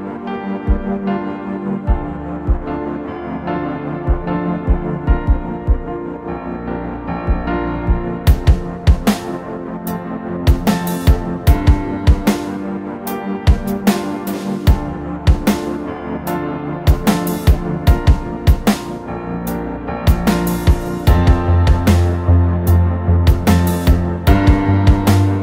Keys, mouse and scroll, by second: 3.1 ctrl+t, 4.6 alt+shift+click, 9.2 Return, 10.6 Right, 10.8 Up, 11.0 Up.